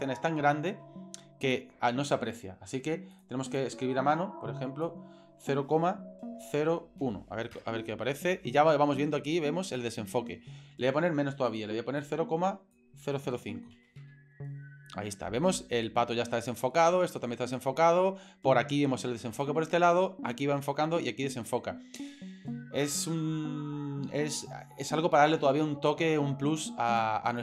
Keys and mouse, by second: 3.2-9.0 drag, 11.5-15.4 drag, 27.0 click.